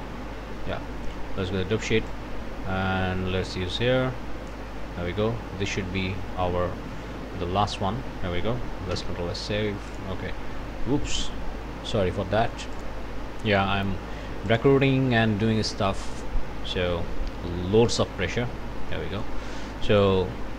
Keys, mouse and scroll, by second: 2.1-4.7 drag, 8.9 ctrl+s, 9.9 click, 12.8 click, 13.5 click, 14.5 click, 16.2 click, 18.9 click, 19.8 click.